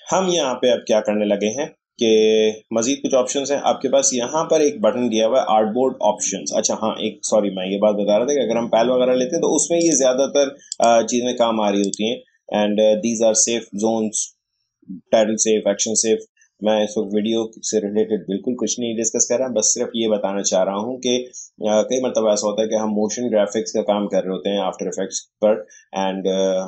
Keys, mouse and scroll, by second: 9.8 click.